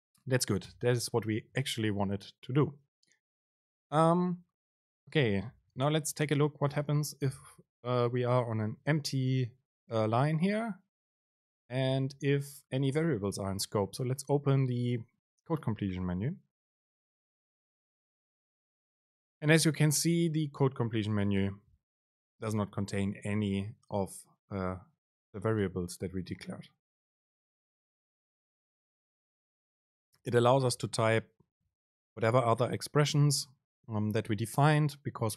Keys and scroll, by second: 6.8 BackSpace, 10.5 BackSpace, 11.1 super+space.